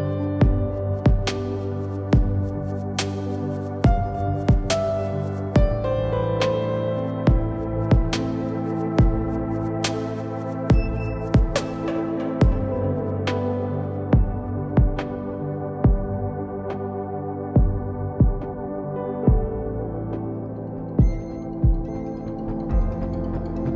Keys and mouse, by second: 5.0 Tab, 5.6 ctrl+Tab, 6.2 Tab, 6.7 ctrl+a, 7.1 Tab, 7.5 z, 8.0 z, 9.0 ctrl+b, 11.1 z, 12.1 KP_1, 14.9 z, 16.2 e, 17.9 z, 18.4 Tab, 20.0 click, 20.7 z.